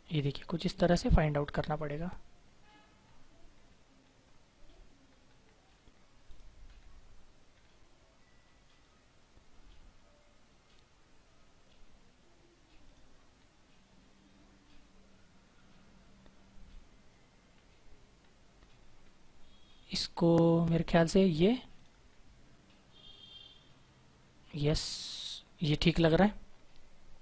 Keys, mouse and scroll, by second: 6.2 click, 6.6-7.7 scroll down 1, 8.2-12.4 scroll up 1, 12.8 click, 13.1-13.7 scroll down 1, 13.7-17.5 scroll up 1, 17.5-18.3 scroll down 1, 20.6-21.7 scroll up 1, 21.7 click, 22.0-22.4 scroll down 1, 22.4-23.7 scroll up 1, 25.1-26.9 scroll down 1.